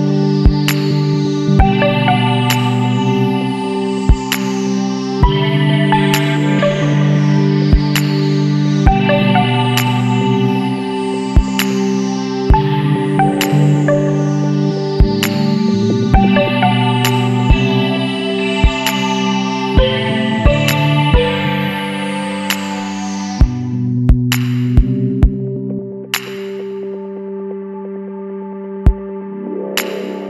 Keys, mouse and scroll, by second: 0.3 space, 1.2 click, 3.2 scroll down 1, 4.6 scroll up 2, 5.2 Up, 7.3 click, 8.6 click, 10.3 click, 11.3 click, 12.1 ctrl+click, 12.7 ctrl+click, 16.0 click, 17.4 scroll down 1, 17.9 scroll up 1, 19.4-23.8 middle drag, 19.7-25.1 drag, 25.6 scroll up 1, 26.6 Right.